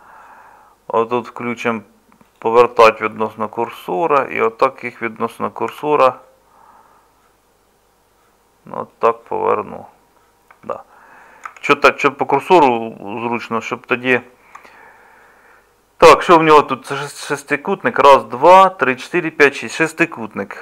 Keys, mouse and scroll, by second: 5.7 r, 10.5 Tab, 11.5 Tab.